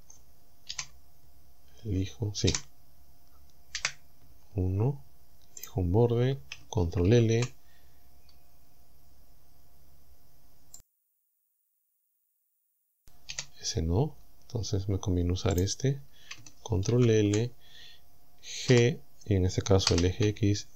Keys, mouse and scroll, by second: 0.7 KP_7, 2.5 KP_7, 3.8 KP_1, 4.8-5.1 scroll up 2, 5.6 right click, 7.1 ctrl+l, 8.0-8.4 scroll up 2, 8.8 scroll up 2, 9.8-10.2 scroll down 2, 10.8 right click, 11.3-12.6 middle drag, 13.3 KP_7, 15.6 right click, 16.9 ctrl+l, 18.7 g, 19.9 x.